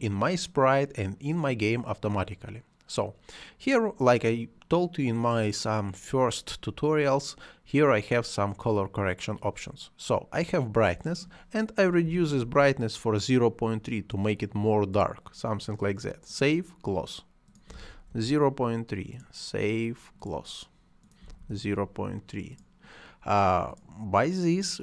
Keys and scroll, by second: 11.8-12.6 typing, 17.4-18.2 typing, 21.2 ., 21.5 Return, 24.7-24.8 typing.